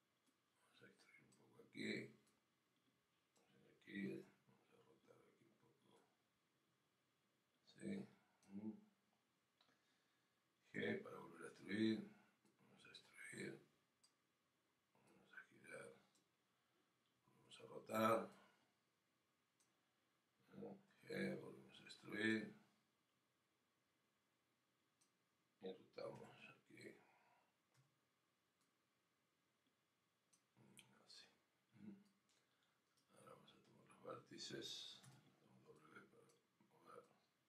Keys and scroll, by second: 12.3 g.